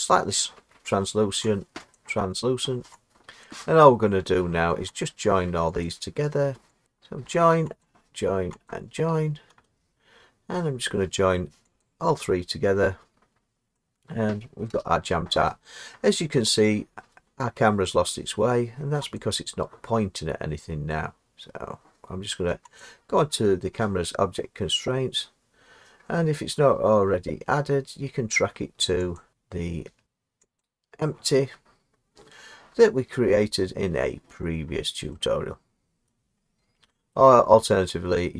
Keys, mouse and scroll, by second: 2.0 click, 3.5 click, 5.9 click, 6.8 click, 8.2 shift+click, 9.7 right click, 11.9 click, 13.3-14.0 scroll down 3, 14.0-14.8 scroll up 1, 14.8 0, 19.0 scroll, 19.2 click, 22.8 click, 29.2 click, 30.7 click, 34.7 middle click, 34.8 middle click, 34.8 middle click, 36.1 middle click, 36.5 middle click, 36.6 middle click, 37.2 middle click.